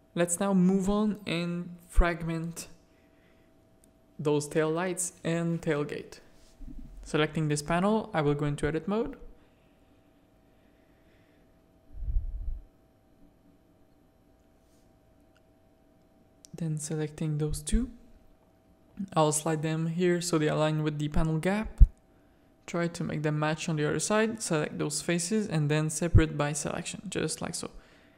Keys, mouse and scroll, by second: 1.2 middle click, 1.6 shift+middle click, 2.1-3.3 middle drag, 3.3 z, 4.0 middle click, 4.5-5.1 middle drag, 5.3 middle click, 10.2 middle click, 10.7 middle click, 12.7 Tab, 13.0 middle click, 13.7 middle click, 14.5 z, 14.8 a, 15.9 click, 16.3 z, 16.7 g, 18.6 a, 19.1 click, 20.0 g, 22.3 3, 22.8 z, 23.0 a, 23.1 middle click, 23.9 click, 25.0 z, 25.5-27.2 drag, 27.6 Tab.